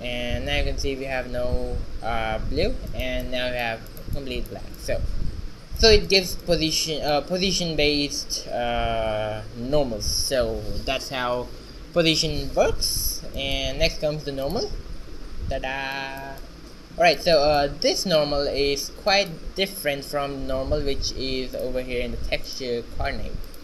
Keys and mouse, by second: 0.0 q, 1.3 g, 8.3 middle click, 13.2 shift+z, 14.6-16.6 drag, 15.3 shift+z, 20.4 shift+a.